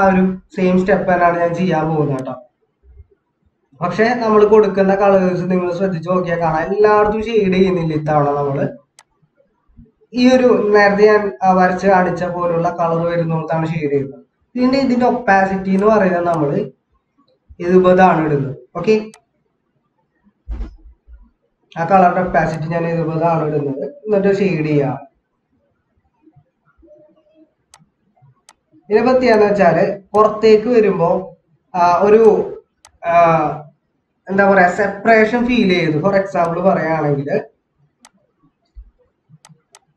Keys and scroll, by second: 31.7 ctrl+=, 35.5 ctrl+-.